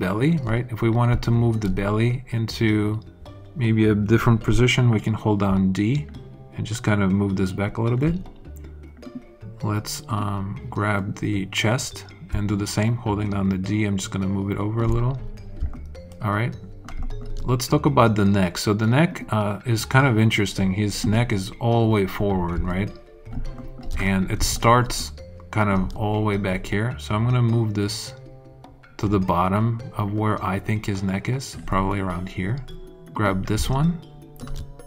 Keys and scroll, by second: 5.4 d, 12.2 d.